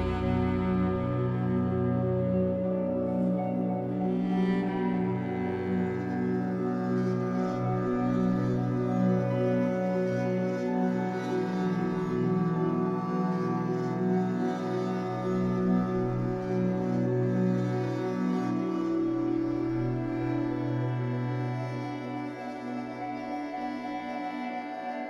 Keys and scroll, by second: 15.8 ctrl+z.